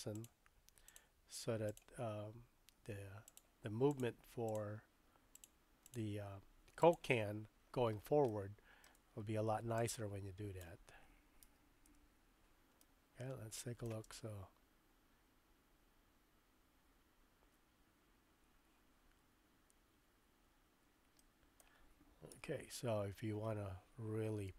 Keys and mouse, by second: 0.2 g, 0.9 click, 1.7 click, 2.0 g, 3.9 click, 4.4 click, 5.3 click, 5.8 click, 6.1 g, 8.3-8.9 shift+middle drag, 9.9 click, 11.4 a, 11.8 KP_Decimal, 12.8-13.9 middle drag, 14.0 space, 21.2-22.7 middle drag, 22.3 KP_3, 24.4 space.